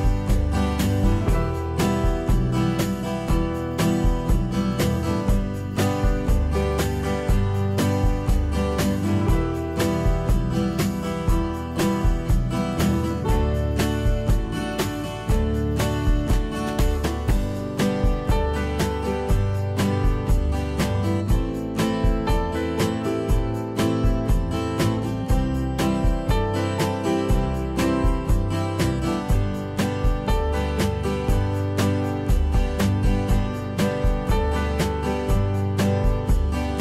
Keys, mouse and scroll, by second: 31.7 F2.